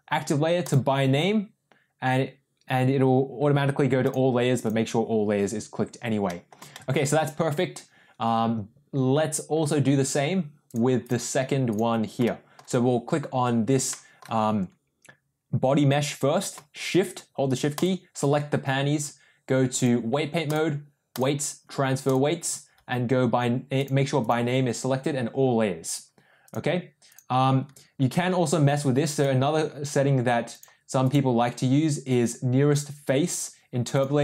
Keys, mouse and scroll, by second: 4.0 click, 6.2 middle click, 6.7 shift+middle click, 10.6-11.1 drag, 11.6 click, 12.2-12.5 shift+middle drag, 13.8 middle click, 17.8 shift+click, 19.8-20.5 drag, 21.1-22.3 drag, 23.7 click, 26.4 click, 29.1 click, 30.9-34.2 drag.